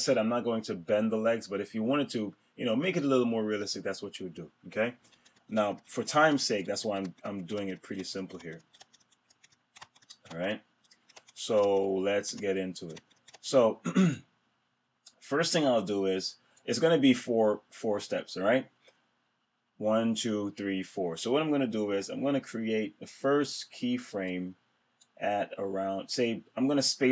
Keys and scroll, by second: 4.9 super+z.